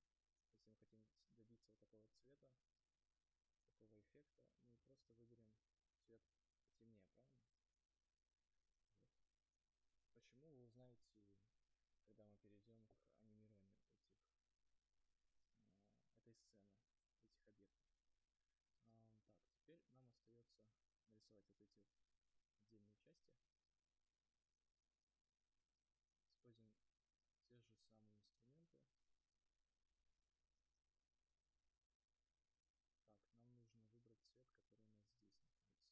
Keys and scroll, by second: 15.7 space.